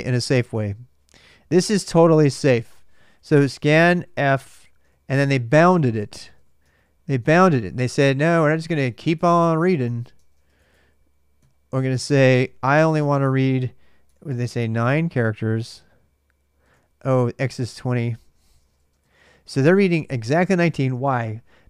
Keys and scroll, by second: 1.9 alt+Tab, 2.6-14.1 typing, 13.8 Return, 14.6 alt+Tab, 16.4 alt+Tab, 16.7-20.9 typing.